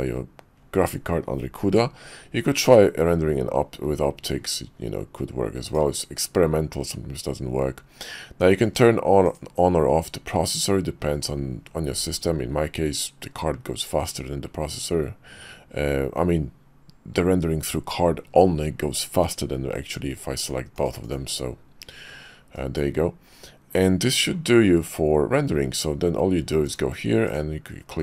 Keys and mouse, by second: 26.7-27.5 drag.